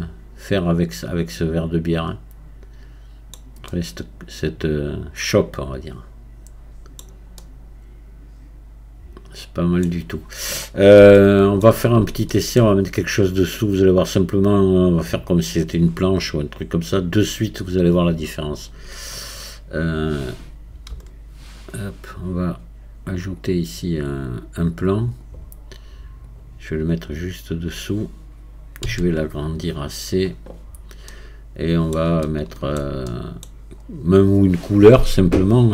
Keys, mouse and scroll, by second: 3.7-6.7 middle drag, 7.4-12.6 middle drag, 12.6-15.7 scroll down 3, 31.1-33.8 middle drag, 33.8-35.7 scroll up 1.